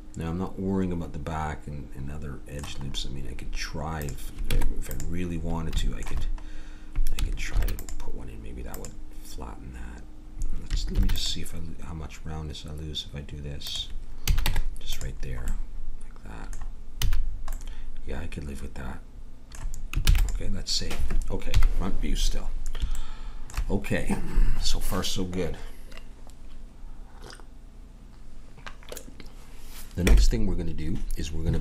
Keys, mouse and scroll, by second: 3.5 middle click, 4.0-6.0 drag, 4.5 Tab, 7.5 ctrl+r, 10.9 ctrl+r, 14.3 a, 14.5 Tab, 15.6-17.3 middle drag, 17.0 a, 20.1 ctrl+s, 21.5 KP_1.